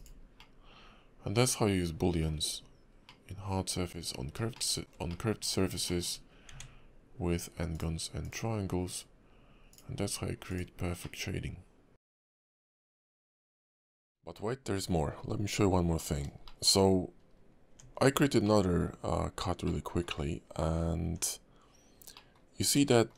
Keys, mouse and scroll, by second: 0.4 middle click, 2.4 scroll up 3, 3.0 middle click, 4.5 shift+middle click, 5.1 middle click, 5.8 shift+middle click, 6.2 scroll up 2, 6.5 Tab, 7.7 click, 11.0 middle click, 12.3 scroll up 2, 12.5 Tab, 12.7-13.3 scroll down 7, 13.3 middle click, 14.5 middle click, 16.0 middle click, 16.4 shift+middle click, 16.6 shift+middle click, 16.8 scroll up 2, 17.2 scroll down 1, 17.7 Tab, 18.0-18.4 scroll down 4, 18.4 middle click, 18.9 scroll up 2, 19.6 middle click, 20.1 scroll up 2, 21.0 Tab, 21.8 scroll down 1, 22.1 middle click, 22.9 shift+middle click.